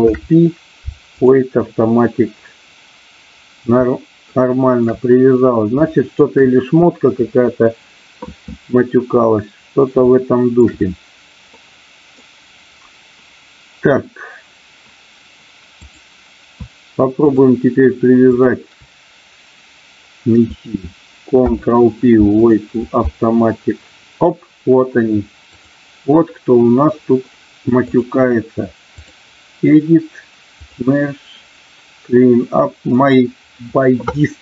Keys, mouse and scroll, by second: 0.0 ctrl+p, 4.3 shift+middle click, 5.8 shift+middle click, 10.1 shift+middle click, 11.5 middle click, 17.2 shift+click, 18.2 shift+click, 21.3 ctrl+p, 25.6 click, 27.7-29.1 drag, 30.7-33.2 drag.